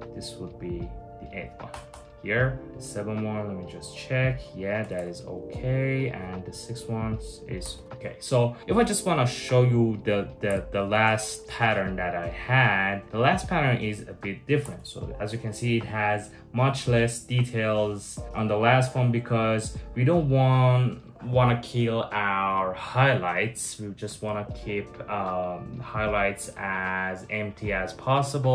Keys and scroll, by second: 18.9 super+z.